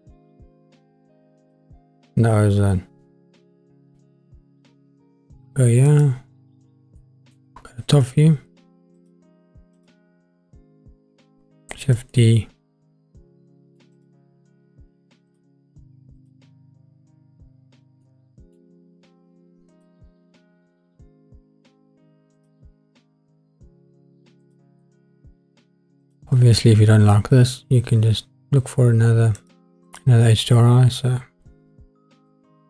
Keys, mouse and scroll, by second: 1.8-5.9 middle drag, 5.9 click, 6.5 scroll down 2, 6.9-7.4 middle drag, 8.9 click, 9.7 click, 10.9 scroll down 3, 11.8 shift+d, 12.1 click, 12.1 middle click, 13.9 click, 15.3 click, 16.2 click, 18.0-18.6 middle drag, 19.7 click, 20.7-21.1 scroll up 2, 22.6 click, 24.4 click, 26.0-29.5 drag, 32.3 click.